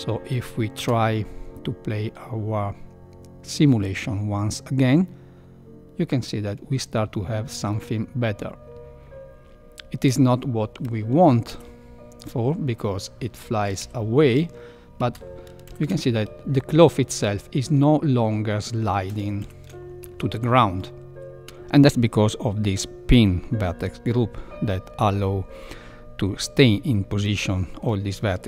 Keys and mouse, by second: 0.7 space, 11.9 shift+Left, 14.4 shift+Left, 14.9 space, 15.7 shift+Left, 16.3 space, 17.2 space, 19.4 shift+Left, 20.0 space, 27.3-27.8 middle drag.